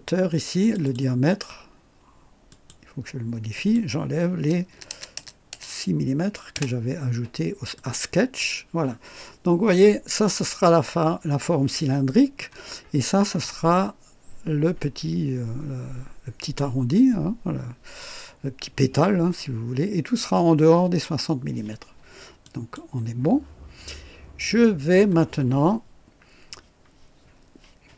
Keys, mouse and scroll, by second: 0.6 click, 2.5 click, 3.5 click, 4.7 BackSpace, 5.5 BackSpace, 6.5 Return, 7.7 click, 22.4 click.